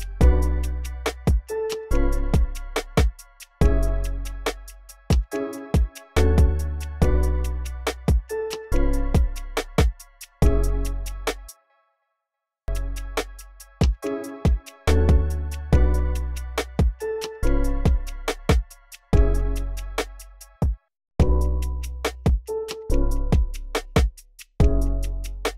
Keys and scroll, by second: 1.8 super+w, 6.3 x, 11.2 space, 12.5 v, 16.2 v, 19.2 alt+shift+n, 20.3 space, 21.0 space, 22.8 alt+super+s, 24.1 y, 25.0 shift+s.